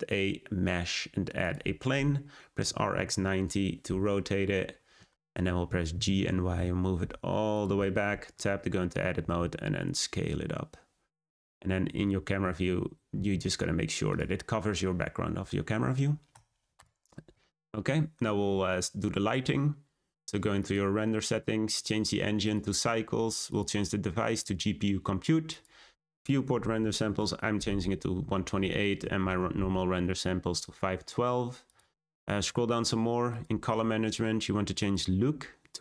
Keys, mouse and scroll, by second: 2.5 r, 4.2-4.6 middle drag, 4.6-5.5 scroll down 6, 5.0-5.4 shift+middle drag, 5.9 g, 7.8 shift+middle click, 8.2 Tab, 8.9 a, 9.1 s, 13.1 s, 16.3 Tab, 16.7 click, 20.5 click, 21.6-31.9 drag, 32.0-33.2 scroll down 10, 33.2-33.7 drag, 33.7-34.7 scroll down 10, 34.7-35.8 drag.